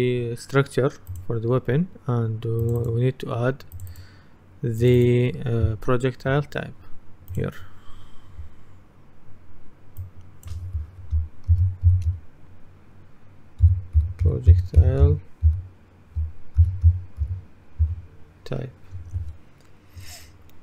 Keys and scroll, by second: 11.3-17.9 typing, 19.1 Return.